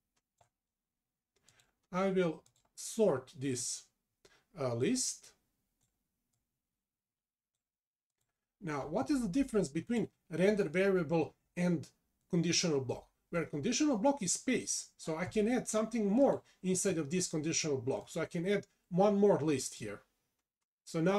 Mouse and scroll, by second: 3.6 click, 4.8 click, 6.4 click.